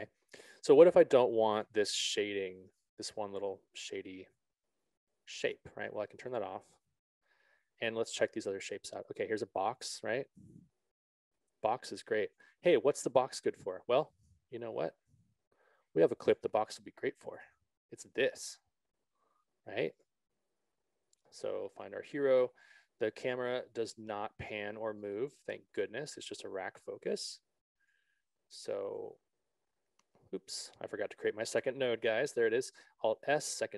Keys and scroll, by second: 14.8 ctrl+z, 30.8 ctrl+z, 33.6 alt+s.